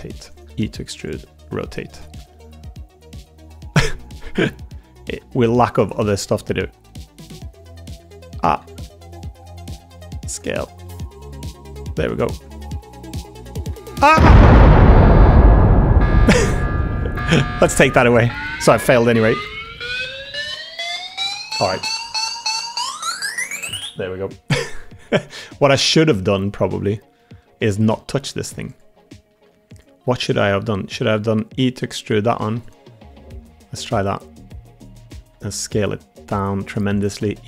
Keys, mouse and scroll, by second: 0.0-1.1 typing, 2.2 click, 2.7 middle click, 3.5 g, 4.4 middle click, 5.0 s, 6.0 middle click, 8.6 alt+z, 9.7 g, 10.4 middle click, 10.8 g, 12.5 middle click, 13.1 1, 13.5 click, 13.6 g, 14.6 Tab, 15.2 middle click, 15.3 middle drag, 15.5 Tab, 15.5-16.4 middle drag, 15.5 g, 15.9 1, 16.5 Tab, 16.9 click, 17.6 middle click, 19.5 l, 20.1 Delete, 21.1 Tab, 24.9 Tab, 25.2 middle click, 25.9 middle click, 26.5 click, 26.5 middle click, 27.1 middle click, 27.4 Tab, 27.7 3, 28.1 Tab, 28.4 3, 28.6 click, 28.9 middle click, 29.4 3, 29.7 click, 30.3 middle click, 30.9 e, 33.4 g, 35.1 s, 36.8 click, 37.1 e.